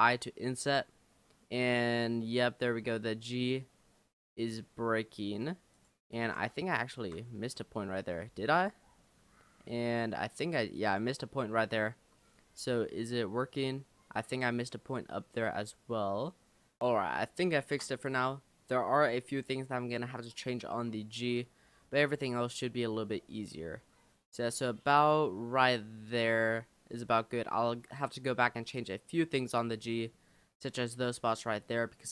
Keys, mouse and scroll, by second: 6.2 ctrl+z, 6.8 shift+middle click, 7.4-8.2 scroll up 9, 8.3-9.6 shift+middle drag, 9.6-10.2 scroll up 4, 10.8 shift+click, 11.4-12.6 scroll down 11, 16.8 click, 17.3 shift+middle click, 18.1 scroll up 1, 21.7-22.2 scroll down 3, 22.2-22.9 scroll up 2, 29.8-30.6 scroll up 4, 30.9-32.1 scroll down 5.